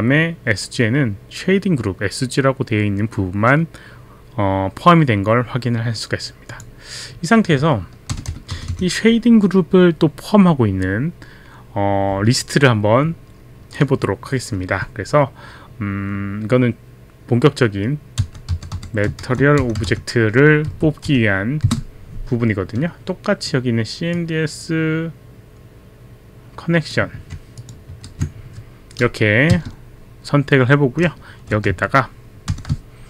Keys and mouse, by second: 6.5 click, 8.6 Up, 8.6 Return, 18.0-21.6 typing, 24.1 click, 27.2 ctrl+c, 27.6 ctrl+c, 27.6 click, 28.1 ctrl+v, 28.2 ctrl+v, 28.2 click, 29.5 space, 32.5 shift+9.